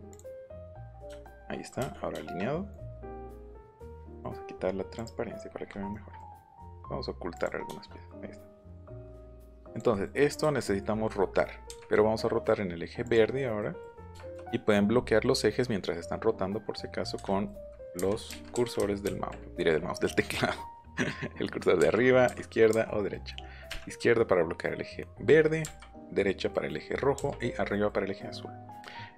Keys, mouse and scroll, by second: 0.1 middle click, 0.3 middle click, 1.2 shift+middle click, 1.9 scroll down 2, 2.1 shift+middle click, 2.7 scroll down 2, 2.9 middle click, 4.0 click, 4.9 click, 5.4 middle click, 5.9 middle click, 6.6 right click, 7.3 right click, 10.5 middle click, 10.9 scroll up 1, 11.6 Left, 13.0 click, 13.2 scroll down 1, 13.3 middle click, 14.1 shift+middle click, 15.6 middle click, 17.1 Escape, 17.3 middle click, 17.9 Right, 18.5 Up, 18.8 Right, 21.8 Up, 22.7 Right, 23.1 scroll up 1, 23.6 Left, 25.6 Right, 26.2 middle click, 27.7 middle click.